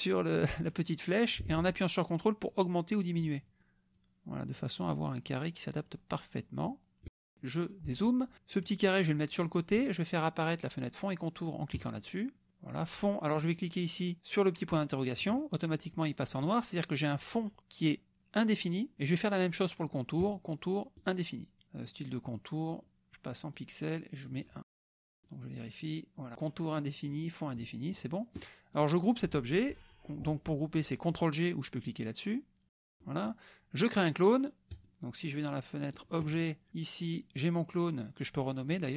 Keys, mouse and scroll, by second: 0.6-3.2 drag, 3.9-7.0 ctrl+drag, 7.0 KP_Subtract, 8.6-9.9 drag, 11.7 click, 14.7 click, 20.2 click, 21.0 click, 22.7 click, 23.6 click, 24.2 click, 24.7 KP_1, 24.9 KP_Enter, 25.2 click, 27.1 click, 27.9 click, 28.7 click, 32.8 click, 34.7 click, 35.9 click, 36.7 click, 37.6-38.9 drag.